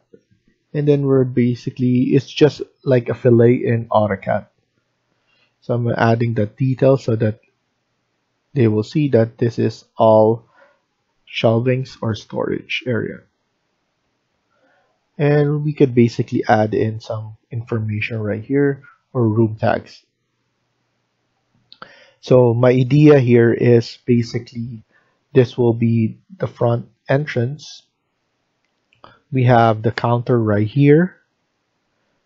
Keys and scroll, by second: 5.2 Escape, 5.4 Escape, 5.9 Escape.